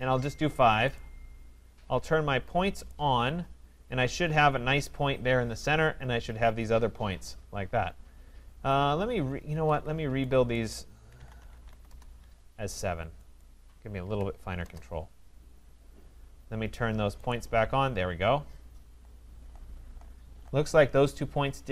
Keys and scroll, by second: 9.5 Escape, 11.9 Return.